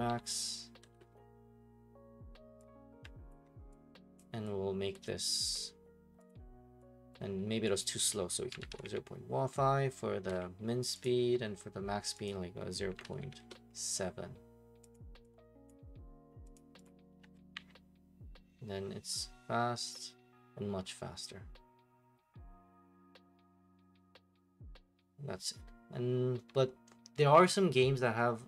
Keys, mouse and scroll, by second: 0.1-0.9 typing, 3.3 ctrl+click, 4.2 click, 4.9 click, 5.3 ctrl+click, 5.5 click, 6.3 click, 7.1 click, 7.8 click, 8.3-9.3 typing, 10.3 Return, 11.2 click, 12.3 click, 12.6-13.7 typing, 14.9 click, 14.9 typing, 15.7 click, 16.5 click, 16.8 click.